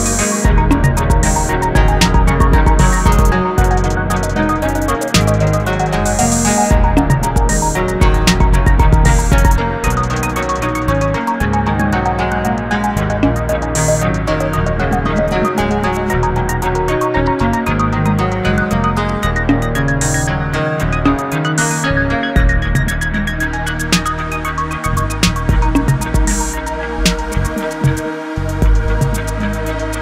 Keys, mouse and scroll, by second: 0.2-1.2 scroll down 11, 1.2-4.1 middle drag, 4.1 shift+a, 6.1 KP_3, 7.8 ctrl+alt+KP_0, 8.8 g, 12.1-14.0 drag, 15.4 click, 17.0-23.5 drag, 23.5 s, 25.9 shift+a, 28.6 click.